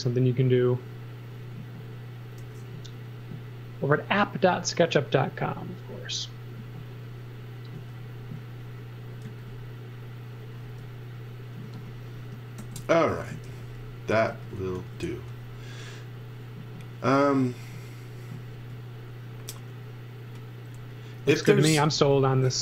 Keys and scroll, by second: 2.4 n, 7.7 space, 9.2 z, 10.6 space, 11.6-15.6 typing, 18.5 space, 21.5-22.6 typing.